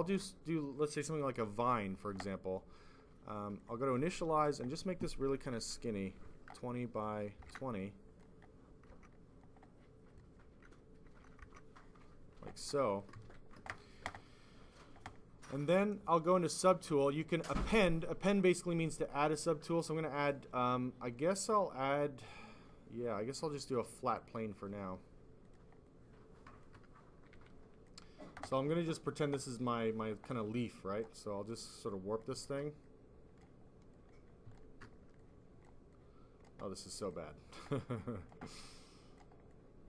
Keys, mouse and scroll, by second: 3.5 click, 4.4 click, 4.8 click, 6.1 0, 6.9 click, 7.3 typing, 7.7 click, 8.8 Return, 10.0 click, 10.2 click, 10.9-11.3 typing, 11.3 Return, 12.7 click, 13.1 f, 15.6 click, 16.9 click, 18.3 click, 19.6 click, 24.0 click, 25.3 click, 25.5 click, 25.7 click, 27.2 click, 27.2 s, 29.6 click, 30.3 click, 31.5 click, 32.1 click, 32.7 click, 33.8 click, 35.1 click, 35.8 click, 36.8 click, 37.1 click, 38.2 click, 38.6 click, 39.4 click.